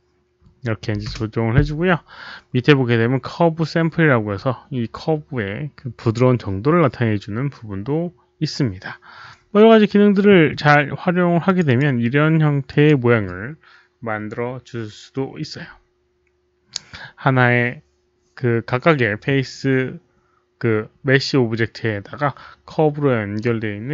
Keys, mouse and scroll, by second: 0.9 KP_1, 1.0 Return, 2.0 Return, 2.0 click, 2.0 KP_1, 6.7 Return, 6.7 click, 6.7 KP_1, 9.2 Return, 9.2 KP_1, 10.0 click, 11.4 click, 11.6 click, 12.6 click, 15.3 click, 20.2 click, 20.4 click.